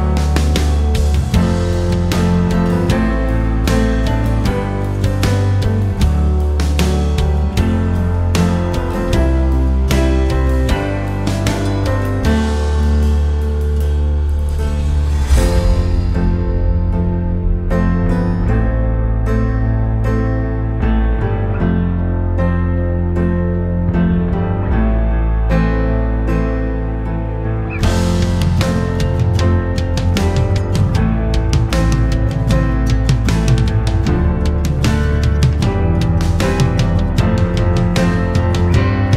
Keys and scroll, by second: 15.4-16.4 typing.